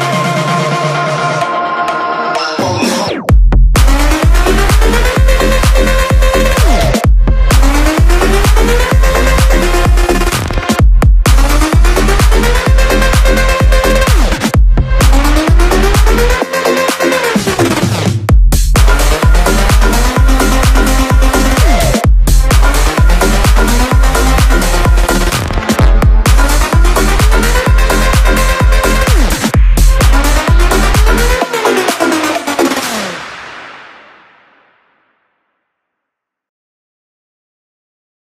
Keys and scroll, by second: 2.2 ctrl+space, 7.2 ctrl+t, 12.4 space, 13.4 ctrl+space, 14.1 shift+Left, 14.2 space, 15.5 space, 18.8 shift+d, 25.4 shift+d.